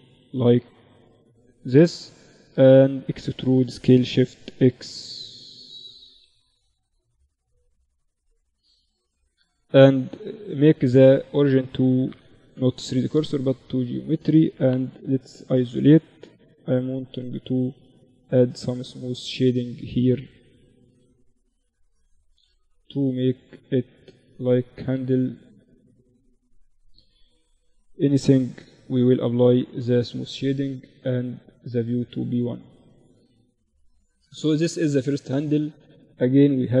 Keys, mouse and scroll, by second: 1.7 middle click, 1.9 e, 4.9 z, 5.1 Tab, 5.7 z, 5.7 z, 7.4 Tab, 7.6 Tab, 9.1 ctrl+alt+shift+c, 14.0 KP_Divide, 15.4 ctrl+3, 16.2 Tab, 16.7 ctrl+r, 18.3 ctrl+r, 20.9 ctrl+r, 23.9 Tab, 27.4 t, 28.1-32.1 drag, 28.3 t, 32.1 KP_Divide, 34.4-36.8 right drag, 35.2 KP_Divide.